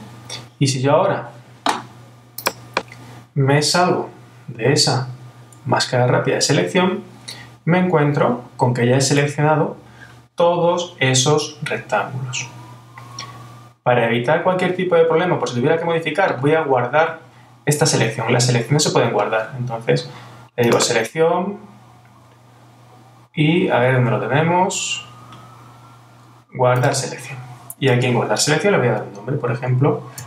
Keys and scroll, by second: 5.6 super+-, 9.2 super+-.